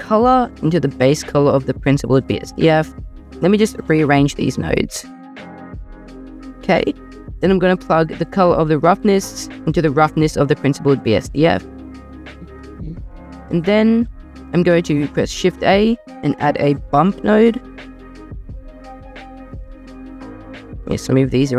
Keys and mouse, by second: 0.0 drag, 3.2 Escape, 3.2 g, 3.2 x, 4.3-6.1 typing, 5.5 click, 5.9 click, 8.9 click, 14.9 shift+a, 20.9 click.